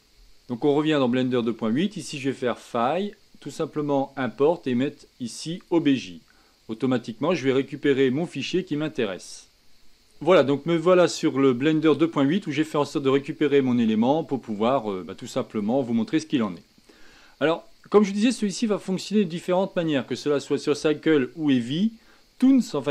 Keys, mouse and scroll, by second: 2.3-5.7 drag, 9.2-10.4 middle drag, 10.4-10.8 scroll down 2, 10.8-12.9 middle drag, 12.9-13.5 scroll up 2, 13.5-16.1 middle drag, 16.1-17.7 scroll down 1, 17.7-19.1 scroll down 1.